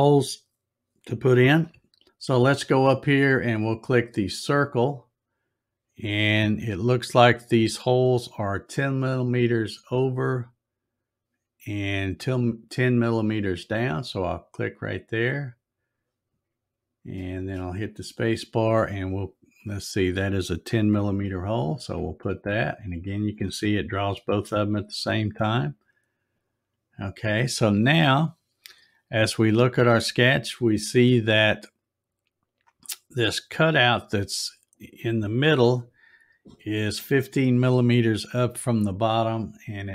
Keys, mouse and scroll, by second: 4.5 click, 14.3-17.5 drag, 17.4 space, 26.3 click.